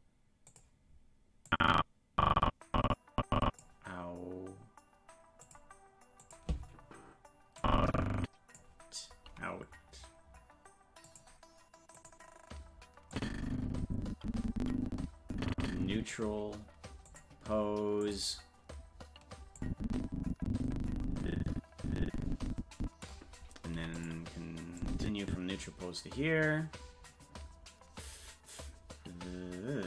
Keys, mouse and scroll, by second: 0.4 click, 1.5-3.6 drag, 5.4 click, 6.2 click, 7.6 click, 11.0 click, 11.9 click, 13.1-16.1 drag, 17.0 click, 18.0 click, 19.6-23.0 drag, 23.7 i, 24.8 click.